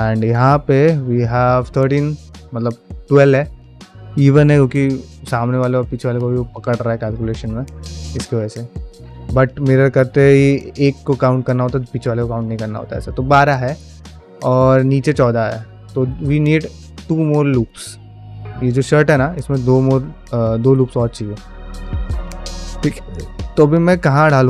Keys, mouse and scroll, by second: 0.1 alt+click, 0.6-2.0 middle drag, 5.3 click, 18.1 shift+middle click, 18.4 ctrl+middle click, 18.6 middle click, 19.4 ctrl+Tab, 20.3 click, 20.5 q, 21.8 shift+middle click, 22.1 ctrl+middle click, 22.4 middle click, 23.0 shift+middle click, 23.3 middle click, 23.9 ctrl+middle click, 24.2 middle click.